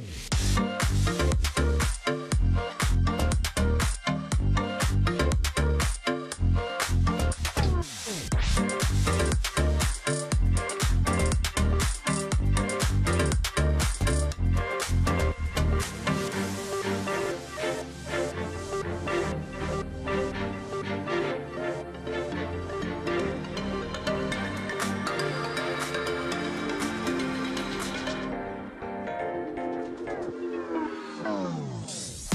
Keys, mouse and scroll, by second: 0.3 alt+scroll up 1, 0.5 space, 3.0 ctrl+c, 6.3 ctrl+b, 16.2 alt+scroll up 1, 22.4 Down, 23.3 Down, 24.2 Down, 24.4 Up, 25.7-26.4 alt+scroll down 1, 26.5 double click, 26.9 alt+scroll down 1, 27.3 space, 29.3 double click.